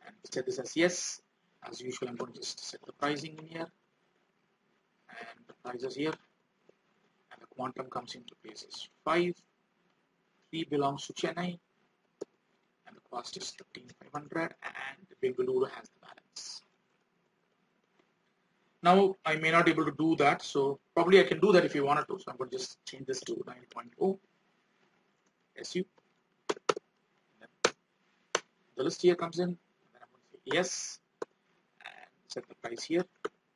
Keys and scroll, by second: 0.9 alt+Tab, 12.6 alt+Tab, 19.2 alt+Tab, 22.0 ctrl+r, 24.5 alt+Tab, 31.6 alt+Tab.